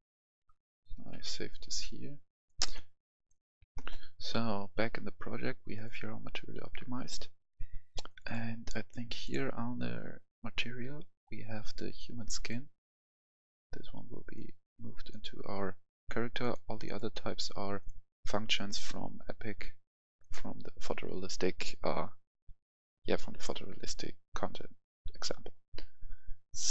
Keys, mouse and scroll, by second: 1.0 ctrl+v, 1.0 ctrl+v, 2.4 click, 3.7 F10, 5.7-14.5 drag.